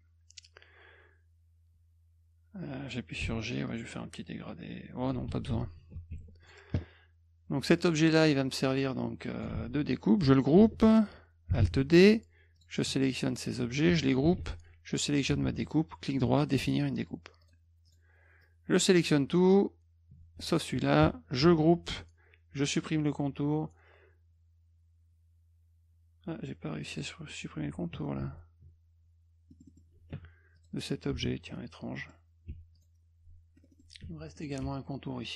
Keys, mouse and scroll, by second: 3.2 g, 3.7-5.1 drag, 6.1 F1, 6.4 click, 7.8 click, 8.7 click, 10.5 ctrl+g, 11.6 alt+d, 12.6 click, 13.3 shift+click, 14.9 shift+click, 15.6 right click, 17.4 click, 17.9 click, 18.4-19.5 drag, 20.5 shift+click, 21.4 ctrl+g, 22.7 middle click, 26.8 click, 26.9 click, 27.9 ctrl+z, 29.5 middle click, 29.5 scroll, 29.7 middle click, 30.6 click, 32.0 middle click, 32.7 click, 33.6 middle click, 33.7 middle click, 34.4 click, 34.7 F1.